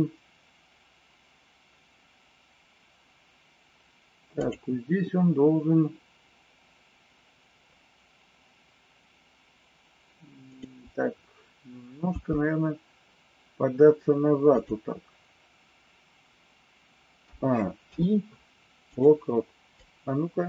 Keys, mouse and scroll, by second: 10.5 click, 12.1 g, 17.2 a, 17.8 i, 19.8-20.4 drag.